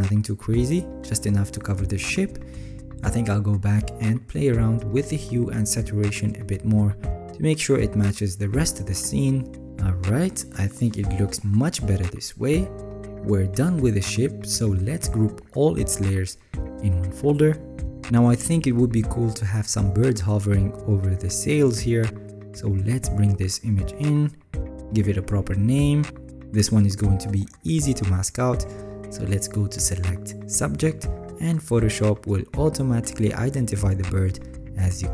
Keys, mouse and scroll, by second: 3.4-3.9 alt+scroll up 1, 3.9 alt+scroll down 5, 4.0 alt+scroll, 4.4 alt+scroll down 2.